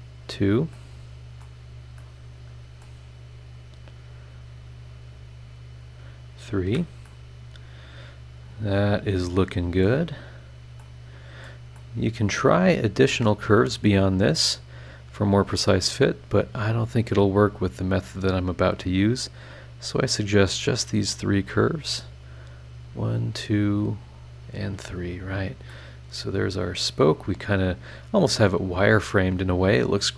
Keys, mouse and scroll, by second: 0.2 scroll down 2, 0.7 middle click, 0.8 click, 2.0 middle click, 2.1 click, 2.2 middle click, 2.8 right click, 5.8 click, 6.6 Escape, 7.0 middle click, 7.1-10.0 drag, 7.1 right click, 7.7 middle click, 9.4 middle click, 10.4 scroll down 1, 10.8 middle click, 10.8 click, 11.7 scroll up 1, 11.7 middle click, 12.7 scroll up 1, 14.4 click, 16.2 click, 17.5 click, 19.7 click, 21.5 click, 24.3 click, 24.7 Escape, 25.4 scroll down 1, 25.7-30.1 middle drag, 25.7-30.1 drag, 25.7-30.1 right drag.